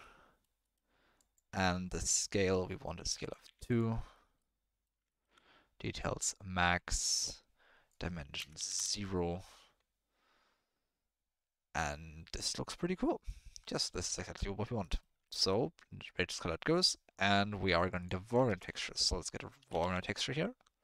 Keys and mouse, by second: 0.1 middle click, 1.2 click, 3.2 click, 4.0 middle click, 4.4-4.8 middle drag, 5.1 ctrl+middle click, 6.1 click, 8.0 click, 13.4 click, 14.9 middle click, 15.3 ctrl+middle click, 16.2 middle click, 17.3 middle click, 18.2 click, 18.4 shift+a.